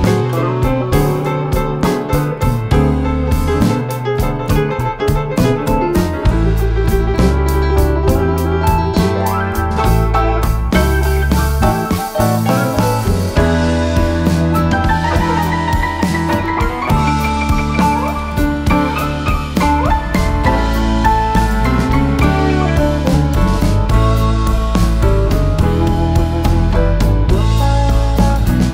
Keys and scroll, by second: 0.4 ctrl+-, 1.4 Home, 4.6 -, 5.1 ctrl+z, 6.4-6.8 typing, 7.6 ctrl+d, 14.2 shift+F6, 15.3 F1, 17.1 typing, 18.7 +, 19.9 +, 20.2 space, 21.5 space, 23.0 shift+F6, 26.4 F1, 26.9 ctrl+d, 27.8 ctrl+*.